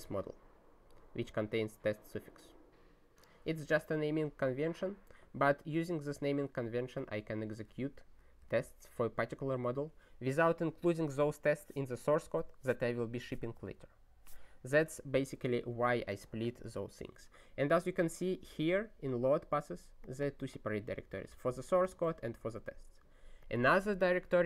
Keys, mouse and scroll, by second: 8.5 super+b.